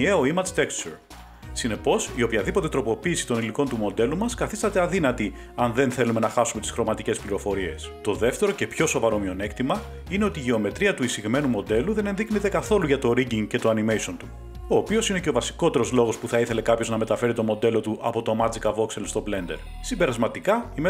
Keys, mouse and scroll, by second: 1.3 click, 1.9 g, 2.5 click, 2.9-3.2 scroll, 4.6-5.9 scroll, 9.6 click, 11.0 Tab, 13.5 middle click, 14.6 middle click, 14.8 a, 15.1 a, 17.9 middle click, 18.0 typing, 20.1-20.8 middle drag.